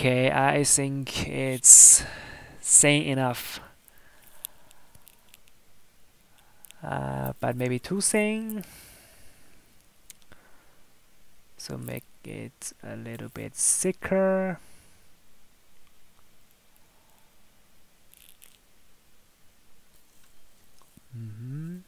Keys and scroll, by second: 4.6 Tab.